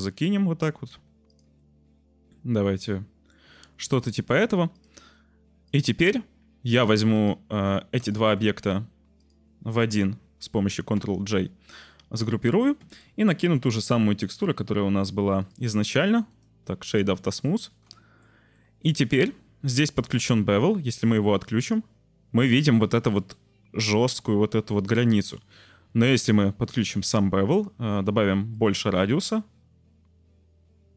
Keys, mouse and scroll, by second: 0.0 click, 0.3-0.6 drag, 0.8 g, 1.2 click, 1.6 click, 2.7 shift+click, 2.8 click, 3.8 click, 4.7 click, 4.9 g, 7.1 click, 9.1 click, 10.9 ctrl+j, 13.6 click, 14.3-15.5 drag, 16.3-17.2 drag, 17.9 shift+middle click, 18.0 shift+click, 18.1 middle click, 18.6 click, 21.4 click, 21.6 click, 26.2-26.8 drag, 28.6-30.9 shift+drag.